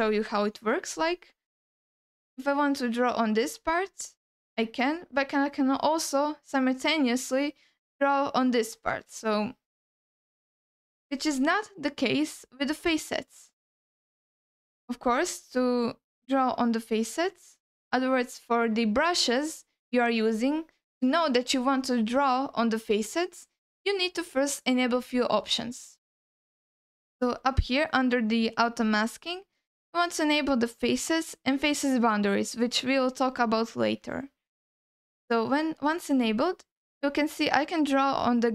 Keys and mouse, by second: 2.2-10.5 drag, 11.6 ctrl+u, 12.6 ctrl+z, 13.0 ctrl+z, 14.1 middle click, 28.8-34.4 drag, 35.9 alt+middle click, 37.9-38.5 drag.